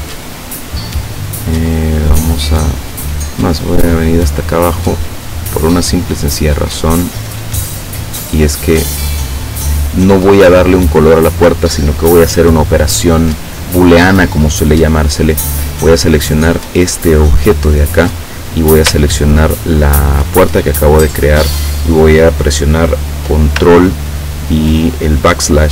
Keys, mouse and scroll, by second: 5.4 click, 7.5 click, 9.0 click, 11.0 click, 11.7 scroll up 1, 12.3 scroll up 1, 12.4-13.0 scroll down 3, 15.9 click, 20.2 shift+click.